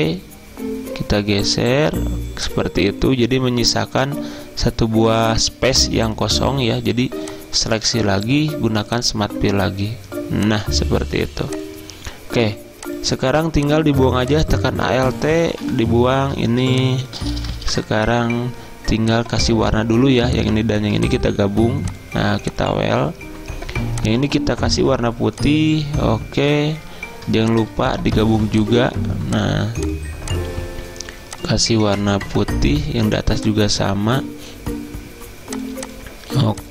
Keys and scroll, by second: 15.5 End, 15.7 Delete, 17.6 ctrl+z, 33.2 z.